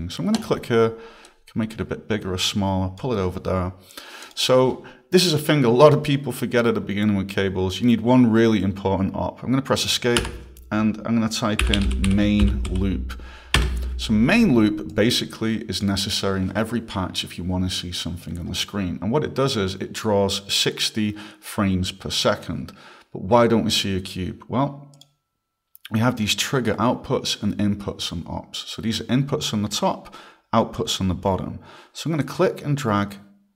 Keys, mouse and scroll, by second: 0.3 click, 1.3 click, 4.2 click, 10.2 Escape, 11.4-12.9 typing, 13.6 Return, 14.9 click, 25.0 click, 32.2 click.